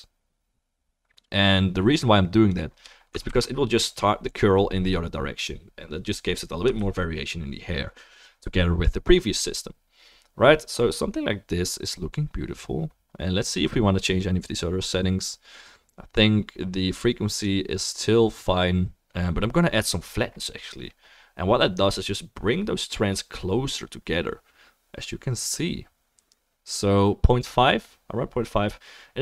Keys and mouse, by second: 3.7 ctrl+s, 3.7-4.7 drag, 3.7-4.7 middle drag, 3.7-4.7 right drag, 5.9 click, 5.9 middle click, 5.9 right click, 6.8 ctrl+s, 21.1-24.3 drag, 21.1-24.3 middle drag, 21.1-24.3 right drag.